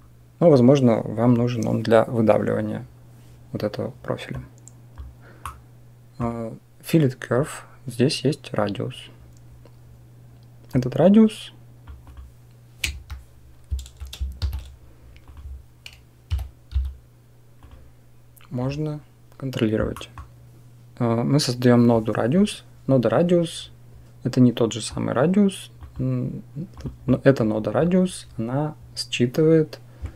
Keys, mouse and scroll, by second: 4.3 click, 5.4 middle click, 10.8-12.8 drag, 14.2 shift+a, 19.9 middle click, 21.9 click, 24.8-26.6 drag, 27.1-30.1 drag.